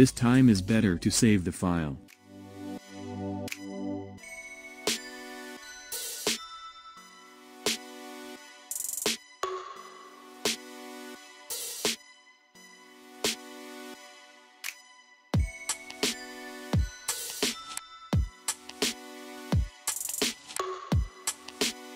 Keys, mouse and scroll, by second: 0.3 ctrl+s, 0.9 scroll down 1, 1.8 scroll up 1, 2.3 scroll up 3, 2.8-5.3 middle drag, 5.3 scroll up 1, 5.8-10.1 shift+middle drag, 16.1-16.5 scroll down 1, 16.5-18.8 middle drag, 18.8-19.3 scroll down 4, 19.3-20.9 middle drag, 20.9 click, 21.5-21.9 scroll up 2.